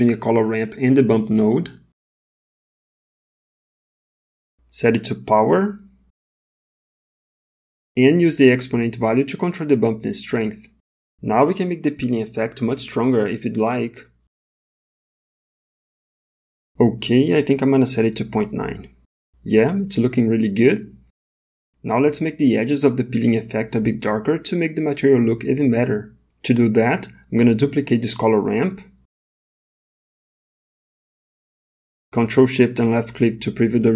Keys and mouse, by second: 0.2 shift+a, 4.9-6.6 drag, 8.2-10.7 drag, 12.7-18.1 drag, 21.1-22.5 middle drag, 22.9 middle click, 27.2 click, 29.4 ctrl+shift+d, 32.1 middle click, 33.1 ctrl+shift+click.